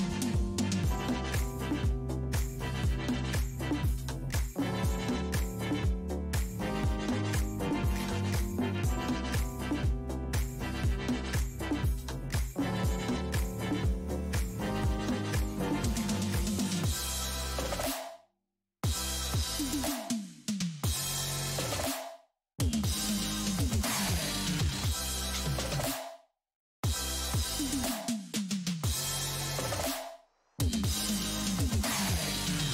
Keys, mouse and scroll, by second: 2.4 f, 9.6-10.9 middle drag, 10.9 space, 11.5 f, 12.3 middle click, 12.9-16.7 drag, 16.7 middle click, 17.3-19.4 drag, 19.4 middle click, 19.9-23.4 drag, 23.4 middle click, 23.8 click, 24.3 middle click, 24.8-26.1 drag, 26.1-27.2 middle drag, 27.2 f, 27.8-29.1 middle drag, 29.1-31.7 shift+drag, 31.7 middle click, 32.2 shift+click.